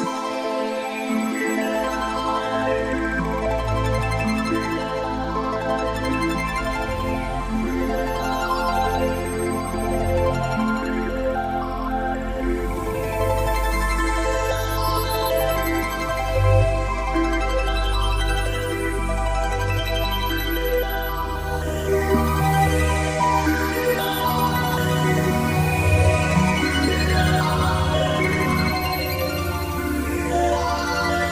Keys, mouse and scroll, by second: 2.7 right click, 4.1 click, 6.1 click, 12.0 click, 19.1 p, 20.9 click, 28.1 Delete, 30.4 click.